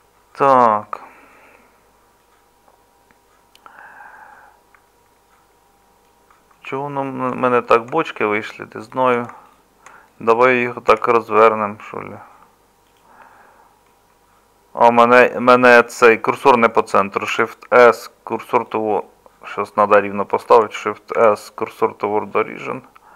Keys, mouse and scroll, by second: 10.9 r, 17.3 shift+s, 21.2 shift+s.